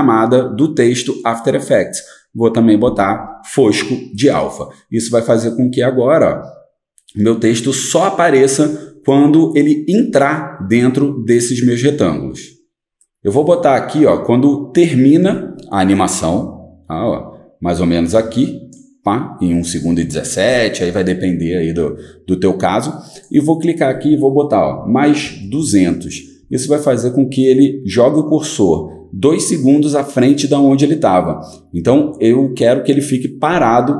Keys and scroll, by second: 25.0-26.1 typing, 26.4 Return, 29.5-30.3 typing.